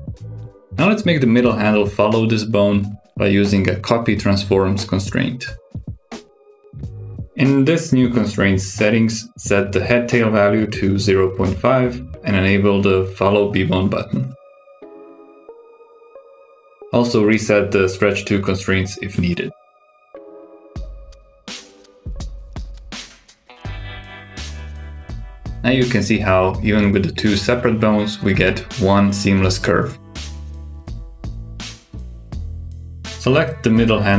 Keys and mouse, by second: 1.9 click, 3.0 shift+click, 4.1 ctrl+shift+c, 7.8 click, 9.4-12.1 drag, 13.5 click, 16.4 click, 20.3 click, 21.8-23.1 drag, 23.2 click, 24.6 click, 25.8 click, 26.3 g, 27.6 r, 30.3 g, 32.2 g, 33.2 r.